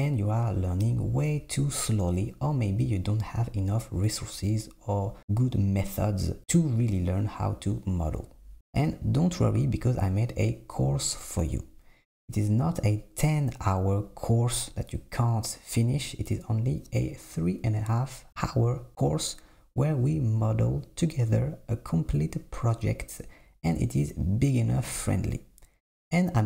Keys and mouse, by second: 1.0 g, 2.7 click, 2.8 g, 3.5 g, 6.7 s, 8.7 click, 9.4 e, 11.3 e, 11.7 s, 13.7 e, 14.4 i, 15.2 Tab, 16.5 click, 17.4 Tab, 17.6 Tab, 17.9 Tab, 18.3 ctrl+e, 19.0 ctrl+r, 19.8 Tab, 20.5 Tab, 22.9 click, 23.2 alt+z, 23.5 click, 24.6 shift+click, 25.6 s.